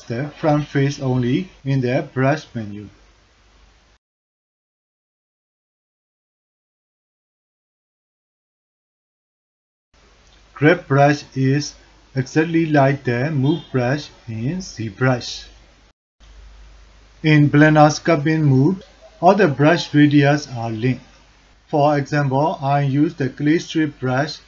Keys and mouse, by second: 3.1 alt+click, 3.7 alt+click, 4.3-6.9 drag, 7.6-9.3 middle drag, 9.6 ctrl+alt+middle drag, 9.9 click, 10.2 click, 11.4-12.8 drag, 13.0 click, 13.4 click, 13.8 click, 14.1 click, 14.4 click, 14.7 click, 15.0 click, 22.9 click.